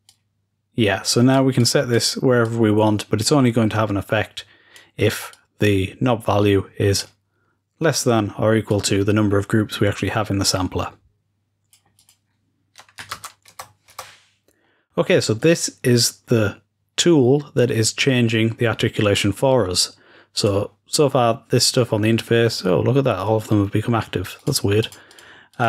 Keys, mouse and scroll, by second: 0.0-2.4 drag, 4.7-5.3 drag, 6.9-8.6 drag, 11.8 click, 12.0 click, 13.0 ctrl+s, 15.3-18.8 drag.